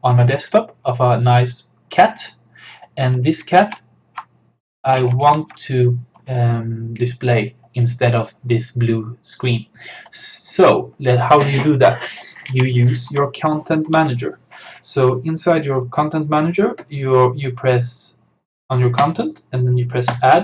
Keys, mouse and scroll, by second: 0.4 click, 3.4 alt+Num_Lock, 3.4 click, 3.6 alt+Tab, 5.0 alt+Tab, 7.8 click, 10.6 click, 12.5 alt+Tab, 13.7 alt+click, 19.0 right click, 20.1 click.